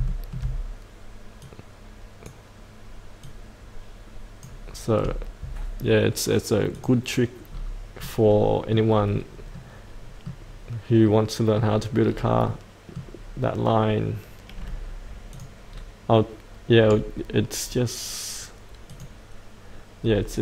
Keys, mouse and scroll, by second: 0.1 shift+middle click, 1.4 click, 4.4 click, 8.0 middle click, 9.1-9.5 scroll down 1, 9.5 middle click, 12.0-12.4 scroll down 1, 12.4 middle click, 13.1-15.3 scroll up 1, 15.3 click, 15.7-18.9 scroll down 1, 18.9 click, 20.0-20.4 scroll down 1.